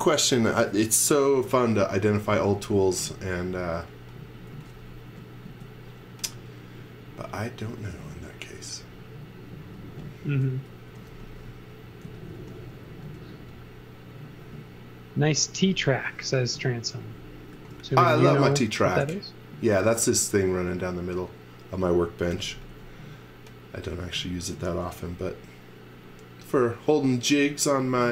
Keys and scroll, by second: 2.4 x, 2.7 v, 3.2 space, 4.2 space, 4.5 x, 5.1 s, 10.6-13.0 typing, 14.0 space, 16.5 p, 17.5 x, 22.3 m, 23.9 space, 24.9 m.